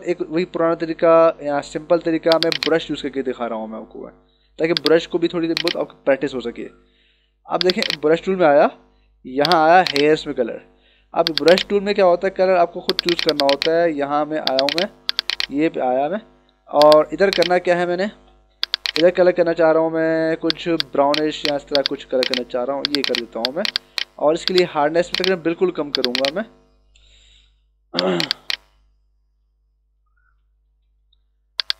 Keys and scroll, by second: 6.6 ctrl+=, 10.3 ctrl+-, 27.5 d, 28.4 space, 30.2 ctrl+=, 31.3 ].